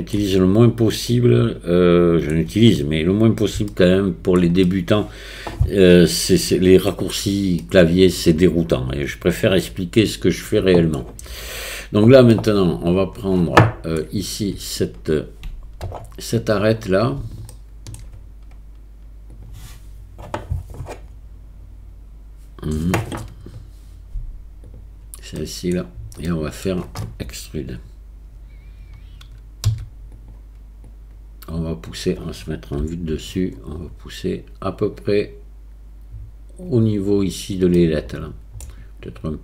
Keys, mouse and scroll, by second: 1.1-2.3 middle drag, 3.7-4.4 shift+middle drag, 4.7-6.7 middle drag, 7.7-10.9 middle drag, 12.3-14.0 middle drag, 15.9 Tab, 17.5 shift+middle click, 25.4 click, 26.3 click, 29.7 e, 30.9-31.9 drag, 32.8 KP_7, 36.0-38.6 drag.